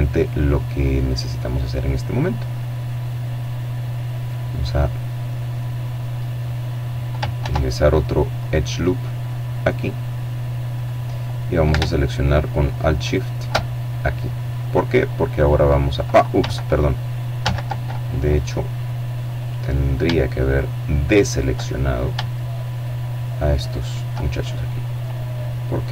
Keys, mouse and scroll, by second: 0.7-2.1 middle drag, 2.1-3.6 drag, 6.3 ctrl+r, 7.2 click, 9.6 click, 11.9 alt+shift+right click, 13.4-15.3 drag, 16.3 ctrl+z, 17.1-18.2 middle drag, 18.2-18.7 scroll up 1, 19.3 shift+right click, 20.1 right click, 21.2 shift+middle click, 22.5 right click, 23.0 click, 24.6-25.9 drag.